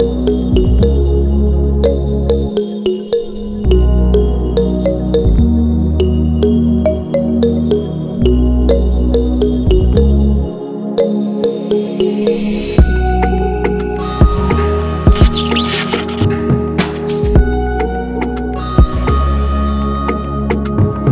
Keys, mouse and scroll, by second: 9.7 click.